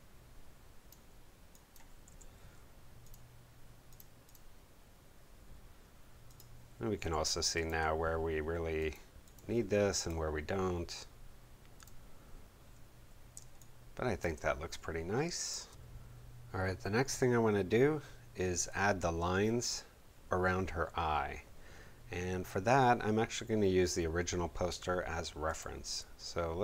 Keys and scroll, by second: 2.1 v, 7.0 b, 13.3 space.